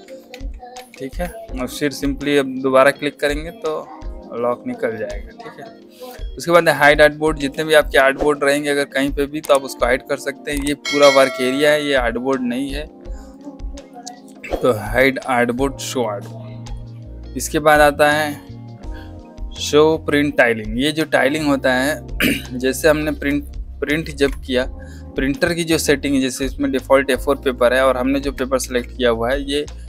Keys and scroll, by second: 0.2 ctrl+z, 1.9 ctrl+z, 7.3 z, 22.7 space, 24.0 ctrl+p, 27.3 Escape, 28.5 o.